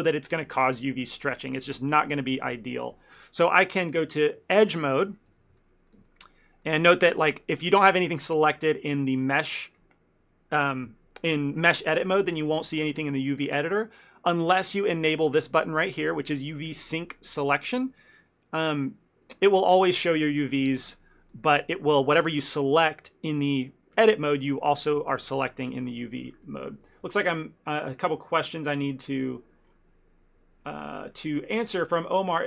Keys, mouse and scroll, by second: 4.7 middle click, 5.3 a, 5.4 a, 5.7 shift+middle click, 6.1 ctrl+middle click, 6.7 middle click, 7.1 ctrl+middle click, 7.7 shift+middle click, 18.8 click, 21.1 ctrl+middle click, 21.4 middle click, 22.2 click, 24.6 ctrl+middle click, 24.9 shift+middle click, 25.8 ctrl+middle click, 26.4 shift+middle click.